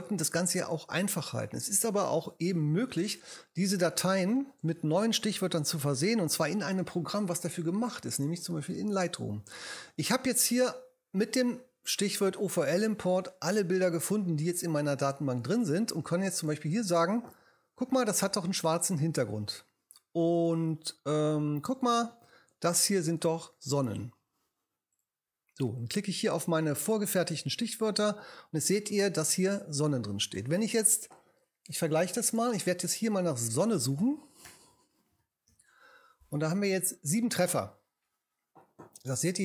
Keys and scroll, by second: 34.5 s, 35.2 u, 35.5 n.